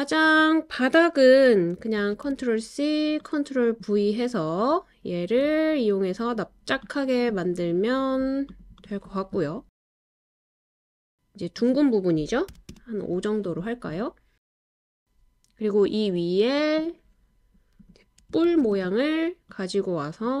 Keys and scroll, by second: 2.0 super+c, 2.2 super+v, 12.9 5, 13.0 Return, 18.4 super+c, 18.6 super+v.